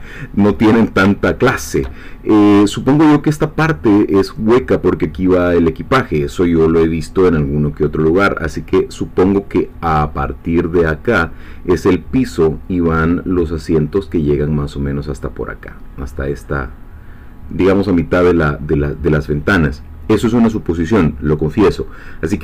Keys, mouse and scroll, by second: 1.3 shift+middle click.